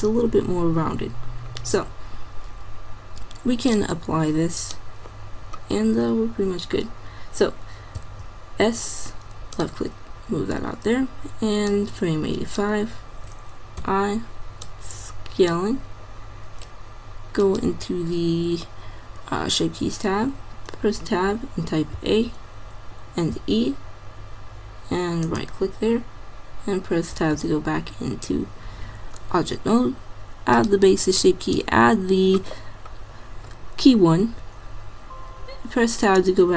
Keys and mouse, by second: 3.7-5.5 drag, 5.8-6.9 middle drag, 8.0 s, 11.8-13.6 drag, 13.8 i, 20.2 Tab, 22.0 a, 23.4 e, 27.2 Tab, 30.6-33.1 drag, 34.4 Tab.